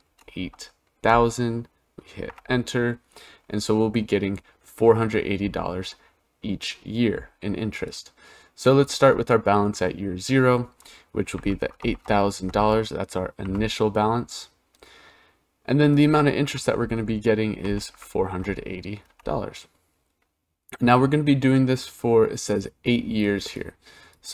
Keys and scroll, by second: 2.0 Return, 18.9 Return.